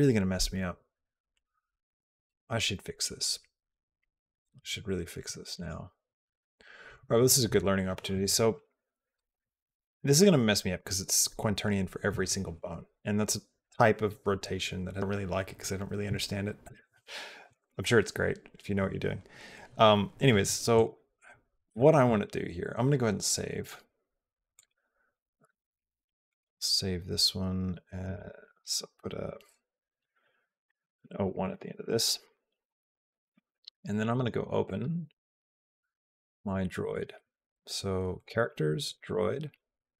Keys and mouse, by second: 5.3 click, 20.6 click, 23.4-24.5 drag, 34.0-35.3 drag.